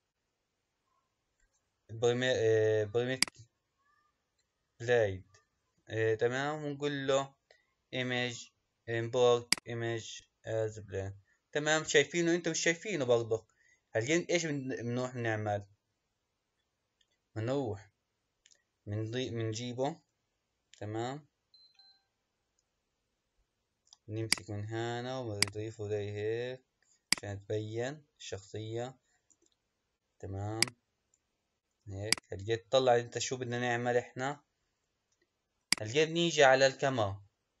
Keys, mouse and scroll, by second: 24.2-25.4 drag, 25.6-27.0 drag, 27.1 click, 30.5 click, 32.1 click, 35.6 click, 37.0-37.6 scroll down 1.